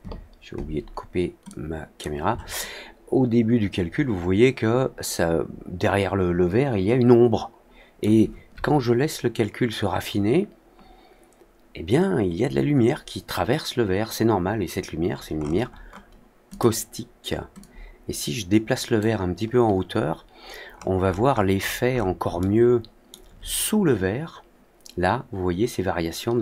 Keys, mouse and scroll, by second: 1.4 click, 2.5-7.9 alt+middle drag, 15.3-15.8 scroll down 2, 15.8 middle click, 16.4 click, 17.5-18.9 drag, 20.6-21.4 scroll down 3, 21.5 middle click, 21.8 middle click, 22.3-23.0 alt+middle drag.